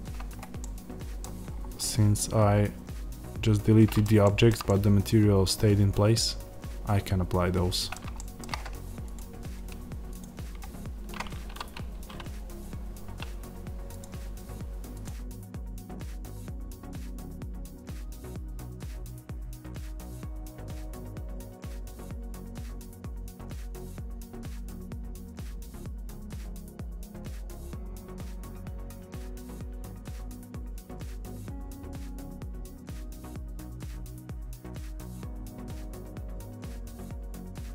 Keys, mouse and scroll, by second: 0.5-1.8 middle drag, 1.3-1.8 scroll up 2, 1.8-4.8 middle drag, 5.2-7.4 middle drag, 16.6 middle click, 18.8 middle click, 19.6 middle click, 20.1 click, 20.3 shift+middle click, 20.9 click, 21.3-22.5 middle drag, 22.2 scroll up 2, 22.5 click, 24.7-26.4 middle drag, 26.4 click, 27.1 middle click, 28.5 click, 30.9 middle click, 31.2 click, 33.6 middle click, 33.8 click, 36.2-37.1 scroll down 2, 37.1-37.5 scroll down 1, 37.5 click.